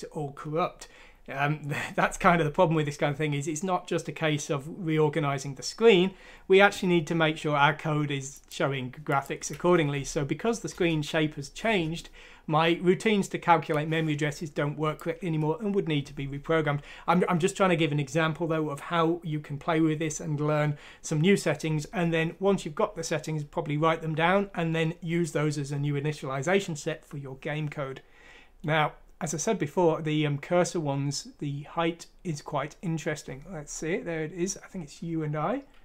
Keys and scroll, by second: 10.0 F6, 10.7 Return.